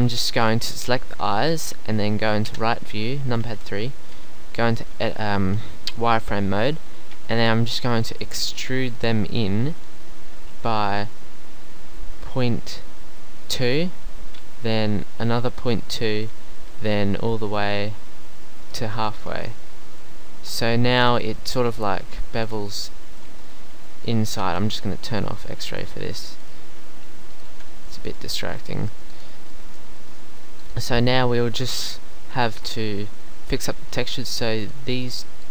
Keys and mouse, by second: 0.3 Tab, 2.5 KP_3, 4.0 z, 10.4 e, 14.4 e, 15.5 middle click, 16.6 e, 19.1 middle click, 19.3 z, 19.6 middle click, 20.4 Tab, 21.0 middle click, 22.6 click, 27.6 middle click, 30.1 middle click, 30.6 middle click, 31.6 middle click, 32.5 Tab.